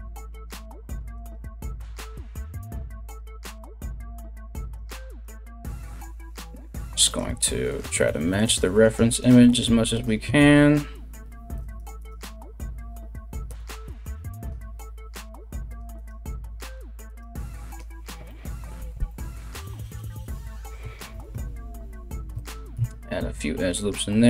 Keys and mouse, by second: 0.2 r, 1.0 ctrl+r, 4.2 alt+right click, 4.7 right click, 5.3 g, 6.2 right click, 6.6 right click, 6.8 g, 7.6 g, 8.4 right click, 8.5 g, 9.1 right click, 9.2 g, 10.8 ctrl+r, 11.6 right click, 12.2 g, 13.5-15.7 right drag, 14.0 click, 14.0 middle click, 14.7 g, 15.7-16.7 middle drag, 15.7 g, 16.7 right click, 16.8-24.2 middle drag, 16.8 g, 18.5 Tab, 20.0 Tab, 20.7 ctrl+r, 22.3 Tab, 23.9 w.